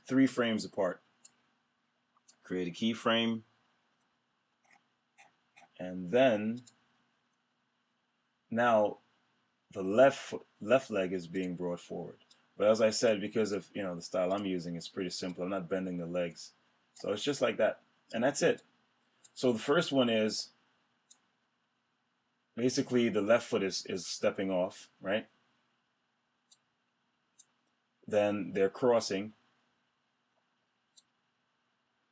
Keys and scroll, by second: 3.7 F6.